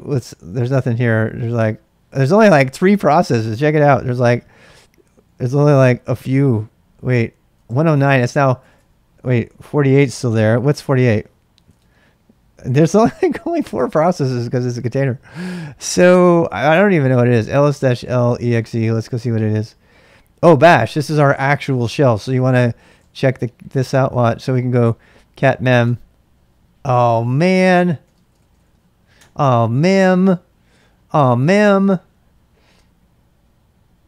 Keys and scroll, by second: 0.0-8.8 typing, 9.8-15.3 typing, 17.1-19.7 typing, 22.6-29.2 typing.